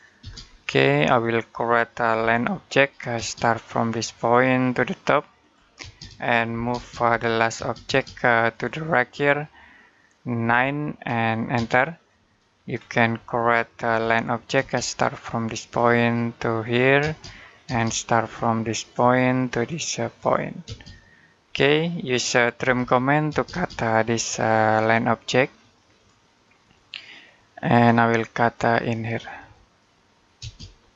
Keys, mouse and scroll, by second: 0.0 space, 0.4 middle click, 0.9-2.0 scroll up 1, 2.0 l, 3.0 space, 4.1 click, 5.6-7.4 typing, 8.3 click, 10.3 9, 11.4 space, 12.6-13.0 scroll up 1, 13.0 middle click, 13.7 l, 14.4 space, 15.4 click, 16.8 space, 18.6 click, 20.5 space, 21.4 middle click, 22.4-23.1 typing, 24.0 click, 30.6-30.9 scroll down 1.